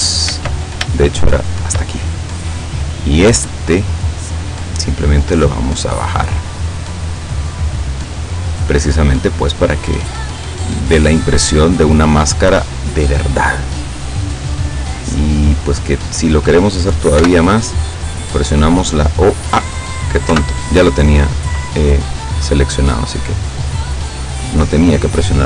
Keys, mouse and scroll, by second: 0.3 ctrl+z, 0.9 ctrl+shift+z, 1.5 shift+right click, 2.1-3.4 shift+middle drag, 4.3-9.9 drag, 11.0 scroll down 1, 11.3-13.0 middle drag, 13.6-16.5 drag, 17.3 o, 18.3-19.7 drag, 20.3 o, 21.7 click, 22.1-22.5 scroll up 1, 22.5 scroll down 1.